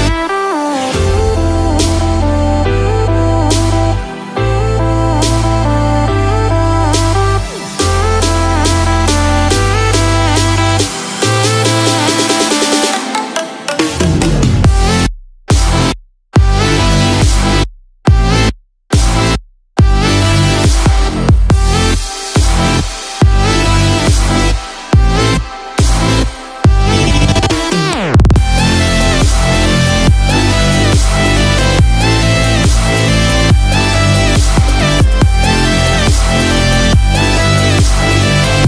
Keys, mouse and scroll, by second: 0.0 click, 6.4 click, 16.6 click, 26.3 click, 33.7 click, 37.7 a, 38.5 click.